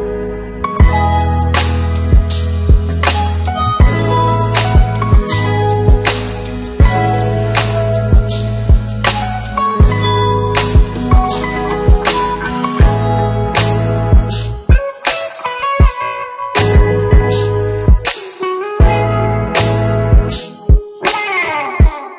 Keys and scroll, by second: 13.7 ctrl+c, 14.6 ctrl+v.